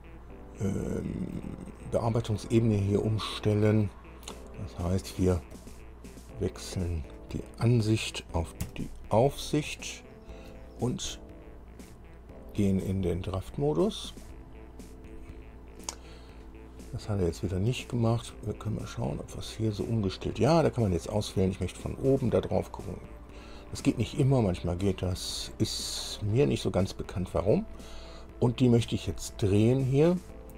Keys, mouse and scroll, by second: 5.8 click, 8.9 KP_2, 10.1 shift+click, 12.6 click, 14.5 click, 19.1 click, 22.2 click, 25.9-26.3 scroll up 2, 26.7 scroll up 2.